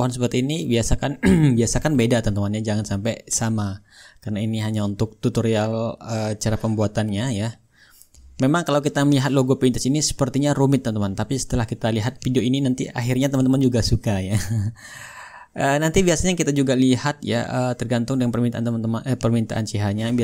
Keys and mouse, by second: 2.9-5.0 drag, 3.9-5.0 right drag, 5.2-7.4 drag, 6.3-7.4 right drag, 7.7-8.8 drag, 8.9-10.0 drag, 10.9-12.0 right drag, 12.3-16.5 drag, 16.9-20.2 drag, 18.9-20.2 right drag.